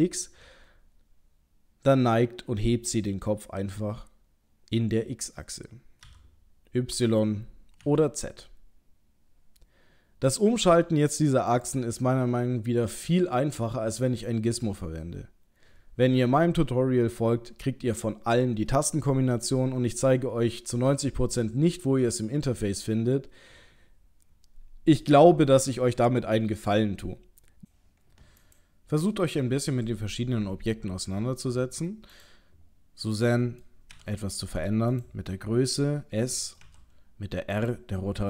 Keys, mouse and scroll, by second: 28.4 click, 32.2 click, 32.7-33.9 scroll down 2, 33.2 middle click, 33.9 s.